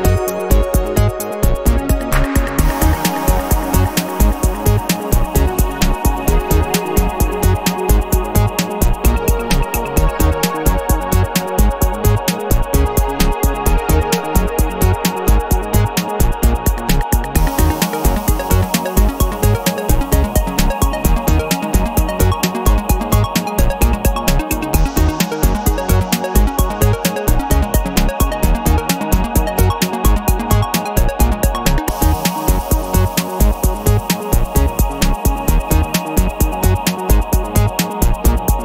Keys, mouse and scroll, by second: 0.9 click, 1.3-2.4 scroll down 4, 3.0 scroll up 2, 3.4 scroll down 2, 4.0-4.4 scroll up 2, 4.7 scroll up 2, 8.4 click, 9.2 click, 10.4 KP_2, 10.7 KP_0, 12.6 click, 13.5 KP_2, 13.8 KP_0, 15.2 BackSpace, 16.5 KP_3, 16.7 KP_0, 18.8 click, 19.7 KP_2, 19.9 KP_0, 22.7 click, 23.5 click, 24.3 KP_2, 24.5 KP_0, 26.1 click, 27.6 KP_3, 27.8 KP_0, 29.2 click, 30.0 KP_2, 30.3 KP_0, 31.5 click, 32.5-32.9 scroll down 2, 33.2 scroll up 1, 33.8 click, 34.6 click, 35.9-37.3 drag, 37.8 click, 38.4 click.